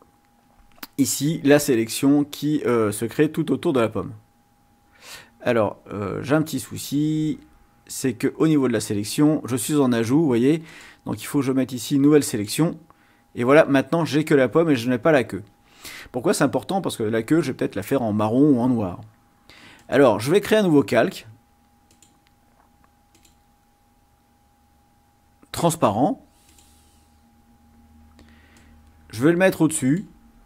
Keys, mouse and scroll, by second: 10.6 click, 12.3 click, 19.8 click, 21.9 click, 23.2 click, 26.5 click, 28.6-30.2 drag.